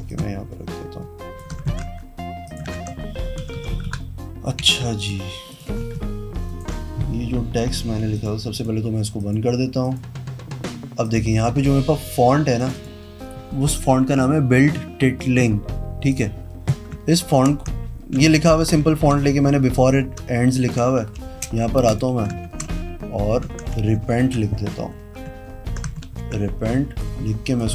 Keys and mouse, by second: 0.3-1.4 shift+drag, 1.9 ctrl+a, 2.7 click, 2.9 d, 3.6 Down, 3.9 Down, 4.1 Down, 4.8 z, 5.2 click, 5.7 click, 5.8 v, 6.6 ctrl+alt+right click, 8.3 click, 8.7 click, 9.3 click, 10.0 click, 11.2 click, 12.8 click, 16.3 click, 20.1 alt+click, 21.4 t, 22.7 ctrl+a, 23.7 Caps_Lock, 23.7-25.5 typing, 26.4 ctrl+t, 27.2 click.